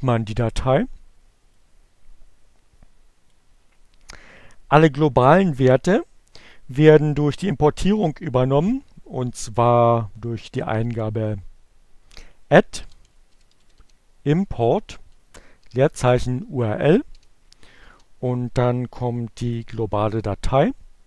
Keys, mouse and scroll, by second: 1.3-2.8 drag, 8.7 alt+q, 11.0-13.9 typing, 15.0-16.7 typing, 18.8-19.7 typing.